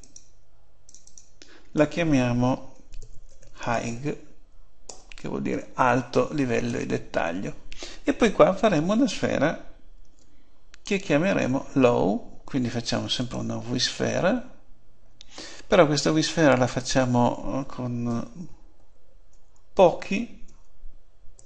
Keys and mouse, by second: 3.0 middle click, 9.9 shift+a, 16.7-18.6 drag.